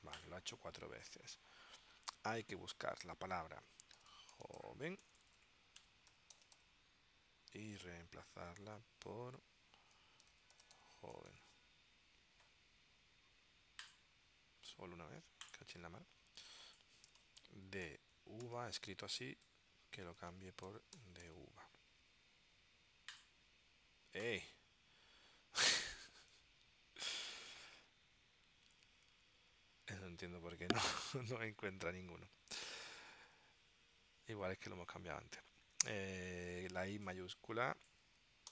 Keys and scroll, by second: 3.8-7.2 typing, 8.9 Tab, 9.6-11.9 typing, 16.9-19.2 typing, 19.6 Tab, 20.5-22.0 typing.